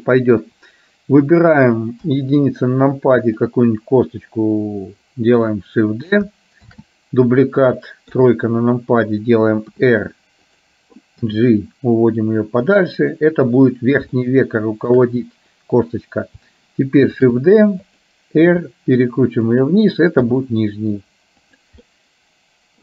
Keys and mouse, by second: 2.1 KP_1, 3.3 click, 6.9 shift+d, 8.3 KP_3, 9.9 r, 11.4 g, 14.3 shift+middle click, 17.3 shift+d, 18.6 r, 20.4 g, 22.0-22.8 middle drag.